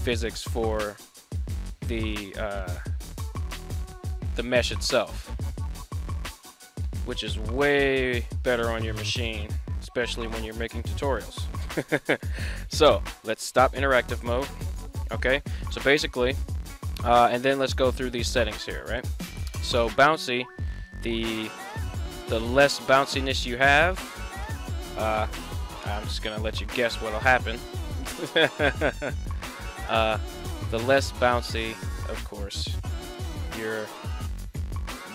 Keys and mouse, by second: 4.4 right click, 5.9 alt+g, 6.9 middle click, 13.6 click, 14.9-15.4 middle drag, 15.6 middle drag, 16.1 middle drag, 18.4 middle drag, 20.7 shift+click, 23.3-24.4 shift+drag, 29.7 drag, 31.6 right click, 32.6 r, 33.6 right click, 34.2 r.